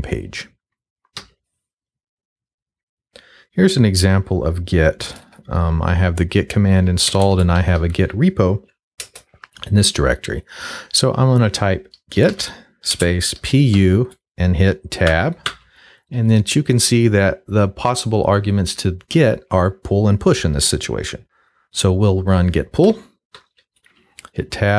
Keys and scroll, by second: 1.2 q, 4.7-5.6 typing, 6.8-8.3 typing, 9.0 Return, 11.9-13.7 typing, 15.1 Tab, 22.9 l, 23.3 Tab.